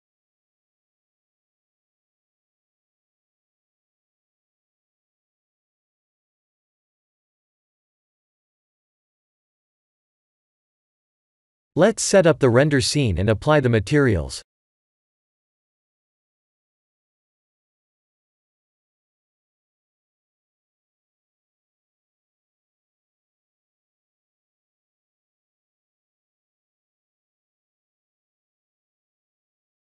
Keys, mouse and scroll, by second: 1.5 middle click, 3.7 click, 4.2 shift+middle click, 4.3 shift+middle click, 4.8-5.3 scroll up 3, 5.8 scroll up 1, 5.8 s, 11.6 KP_1, 11.8 KP_7, 13.2 g, 17.9 click, 18.1 middle click, 19.9-20.5 scroll down 2, 20.3 middle click, 22.3-22.9 scroll down 1, 22.9-23.3 scroll down 1, 23.3 b, 24.7 click, 25.0-25.4 scroll up 3, 25.7 click, 27.2 click.